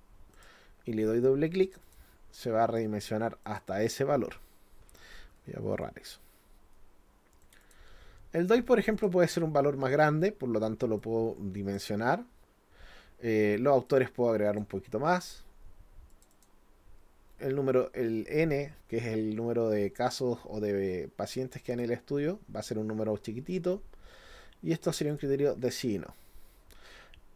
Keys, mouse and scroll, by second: 0.3 click, 1.6 click, 1.8 click, 3.4 click, 7.4 click, 7.6 click, 8.9 click, 11.0 click, 13.9 click, 16.1 click, 16.3 click, 20.1-21.8 drag, 24.9 click, 25.1 click.